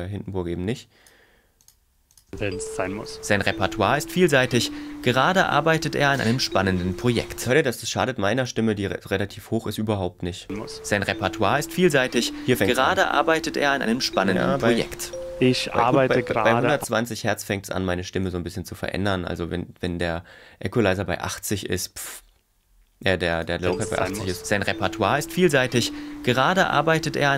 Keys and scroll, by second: 3.1 space, 6.2 space, 7.5 space, 10.5 space, 15.8 space, 23.6 space.